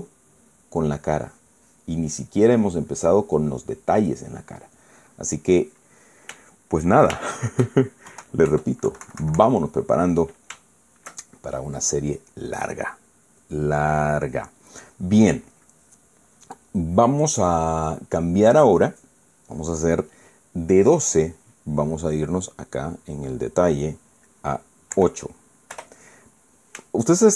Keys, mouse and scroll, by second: 1.7-3.2 drag, 3.4 middle click, 3.8 scroll up 1, 4.0 middle click, 4.6 middle click, 5.5-6.7 drag, 6.8 shift+middle click, 7.7 shift+middle click, 8.8 shift+KP_1, 9.2 KP_Add, 9.6 KP_Subtract, 11.3-11.8 shift+middle drag, 23.3 click, 25.7 8, 26.4 Return.